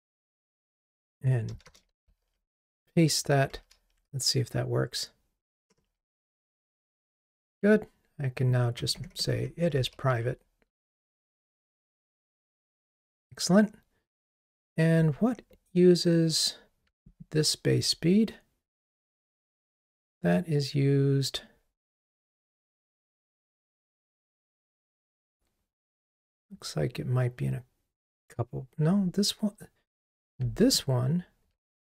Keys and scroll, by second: 2.1 super+v, 3.7 ctrl+r, 9.9 ctrl+r, 17.3 super+b, 30.8 super+b.